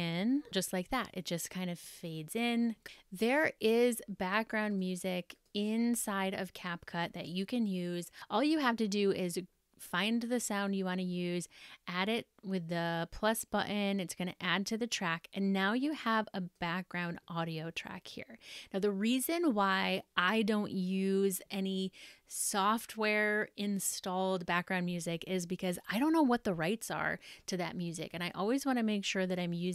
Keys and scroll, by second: 0.9 space.